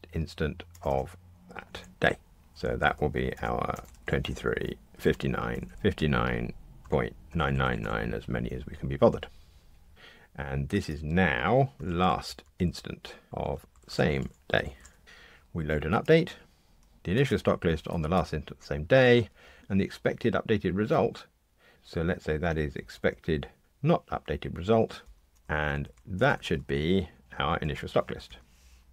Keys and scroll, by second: 21.7 super+z, 28.2 Tab.